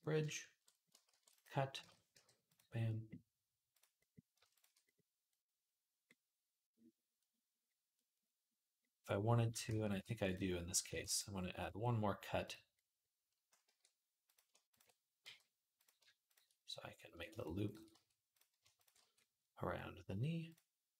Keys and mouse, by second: 0.9 ctrl+r, 1.6 shift+Tab, 2.0 g, 4.2 shift+a, 4.3 shift+click, 4.4-9.8 shift+middle drag, 9.7 ctrl+r, 9.8-13.1 drag, 10.7 ctrl+r, 13.1-14.5 middle drag, 13.5 e, 14.5 ctrl+click, 14.6 middle click, 15.1 f, 15.5 click, 15.6-20.3 shift+middle drag, 17.2 click, 17.7 f, 18.1 click, 18.8 f, 20.3 click.